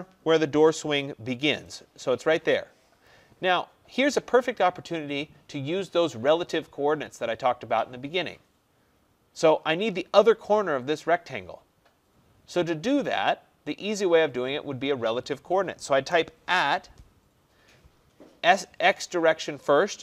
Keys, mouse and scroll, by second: 1.8 click, 16.2-20.0 drag, 16.5 shift+2.